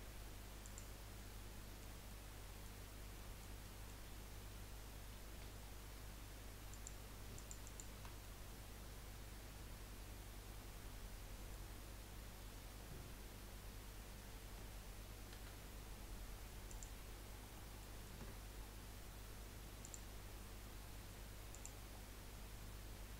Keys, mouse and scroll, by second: 0.7 F3, 1.2-2.8 middle drag, 2.8-3.2 scroll up 2, 3.2-5.3 middle drag, 5.3 2, 6.7 click, 7.3 alt+shift+click, 7.6 alt+shift+click, 8.2-11.3 middle drag, 15.4 F3, 17.5 middle click, 18.1 Tab, 19.8-21.9 drag, 21.9-22.3 scroll down 1, 22.3-23.1 middle drag.